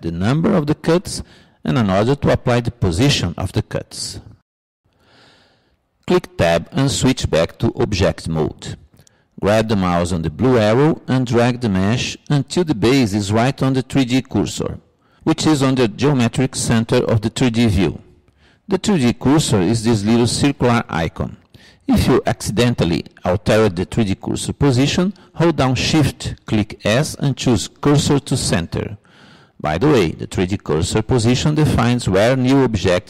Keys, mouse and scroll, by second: 8.5 Tab, 10.7-12.5 drag, 22.9-26.1 middle drag.